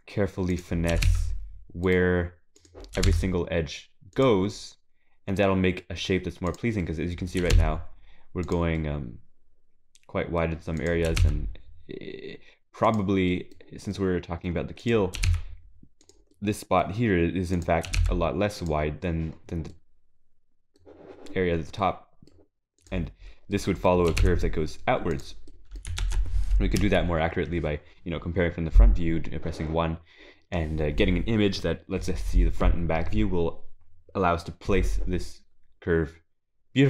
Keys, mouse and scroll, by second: 0.5 click, 0.9 g, 2.6 click, 3.0 g, 4.5 middle click, 6.5 click, 6.8 middle click, 7.4 g, 8.8 middle click, 9.2 g, 10.8 click, 11.1 g, 13.3 middle click, 13.8 scroll down 1, 13.9 middle click, 14.8 click, 15.2 g, 16.3 middle click, 17.0-17.5 scroll up 3, 17.5 click, 17.9 g, 19.4-19.7 scroll down 3, 19.7 middle click, 21.5-21.8 scroll down 2, 21.8 middle click, 22.8 click, 23.5 middle click, 24.1 g, 25.5 middle click, 26.0 ctrl+s, 26.8 KP_1, 26.9 g.